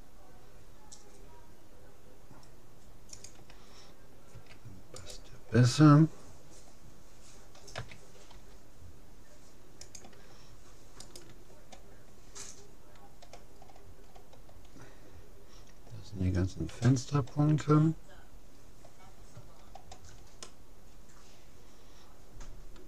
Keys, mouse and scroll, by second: 4.3 a, 5.0-6.6 right drag, 7.8 a, 8.4 g, 11.0-12.8 right drag, 13.6-14.8 middle drag, 14.8-16.0 scroll up 1, 16.0 middle click, 16.7 a, 17.8-18.6 scroll up 1, 18.6-22.2 middle drag.